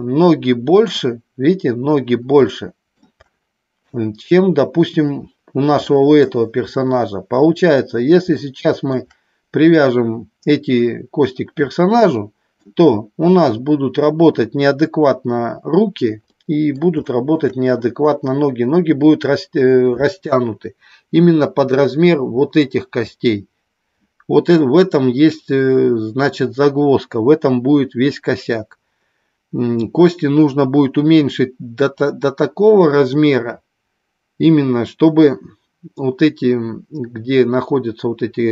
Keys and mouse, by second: 2.4-2.9 shift+middle drag, 5.8-6.2 shift+middle drag, 8.4-8.8 shift+middle drag, 11.7-12.7 middle drag, 16.3 middle click, 16.9 shift+middle click.